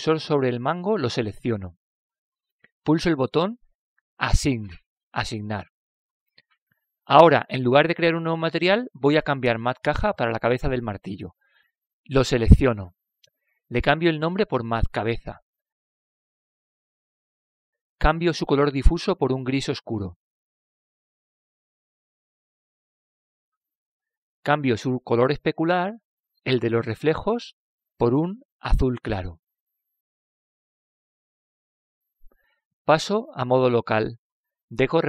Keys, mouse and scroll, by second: 2.5 l, 5.7-7.5 drag, 7.4-8.5 middle drag, 13.6-16.9 drag, 16.2 BackSpace, 19.5-22.9 drag, 26.0-29.3 drag.